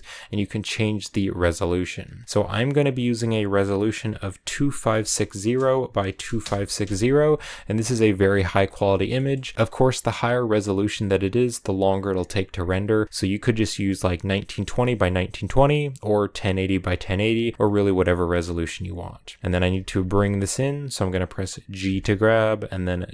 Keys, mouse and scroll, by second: 9.0 shift+middle click, 11.4-19.1 middle drag, 19.1 g, 19.5 g, 21.7 g.